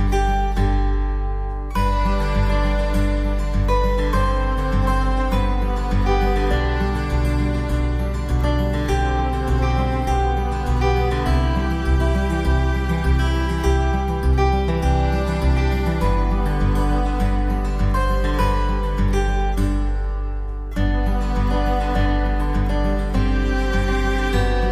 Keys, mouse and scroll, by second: 2.4 x, 4.0 middle click, 4.6 scroll up 2, 5.8 click, 6.2 shift+middle click, 6.7-7.0 scroll up 3, 8.4 alt+right click, 9.9 alt+shift+right click, 10.7 w, 13.6 middle click, 14.3-14.8 scroll down 4, 14.8 Tab, 15.2 middle click, 16.0 ctrl+s.